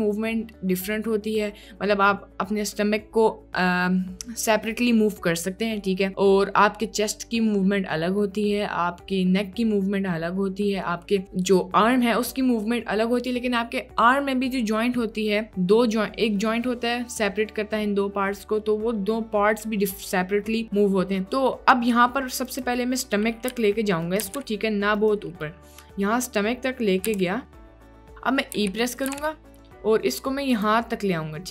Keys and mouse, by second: 23.7 g, 24.3 g, 27.1 g, 28.6 e, 29.1 g.